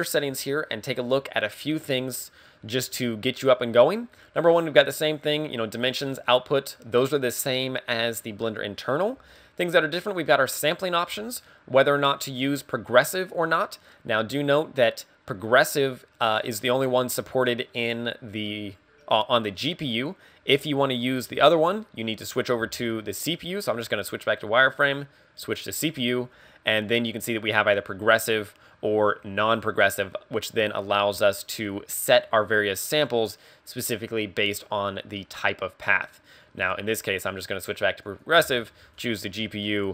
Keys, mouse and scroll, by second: 0.0 click, 3.0 middle click, 6.0 click, 23.5 z, 23.8 scroll down 1, 24.1-24.6 scroll up 1, 24.8 click, 28.4 click, 36.9 click, 38.1 click.